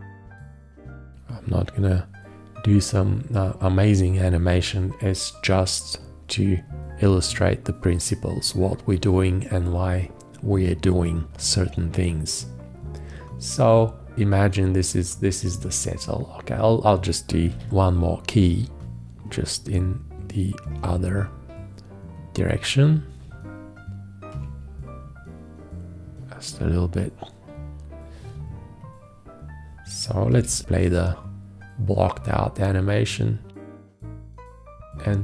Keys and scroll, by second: 0.3 shift+,, 17.7 x, 30.6 Return, 34.1 Return.